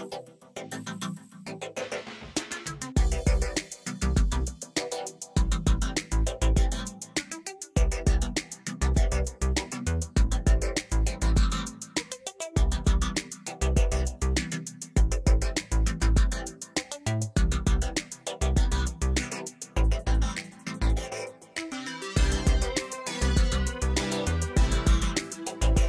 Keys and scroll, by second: 3.3 alt+a, 4.8 alt+shift+z, 5.9 0.